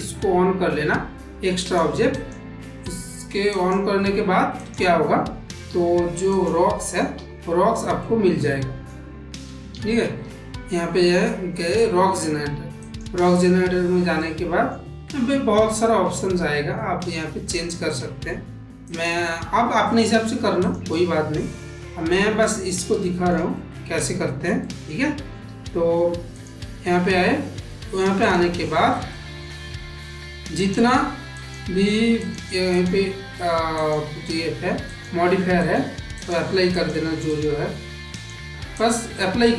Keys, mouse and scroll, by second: 4.5 click, 5.5 Delete, 6.1 click, 7.0 Delete, 7.8-8.7 middle drag, 9.8 shift+a, 14.2 middle click, 17.3 click, 18.7 click, 19.4 s, 20.7-22.3 middle drag, 22.9 shift+middle click, 23.5 middle click, 24.5 ctrl+middle click, 25.3 g, 28.1 click, 29.1 shift+middle click, 30.5-31.4 drag, 32.1-32.7 drag, 33.6-34.9 drag, 35.5-36.1 drag, 36.7-37.3 drag, 38.0-38.8 drag.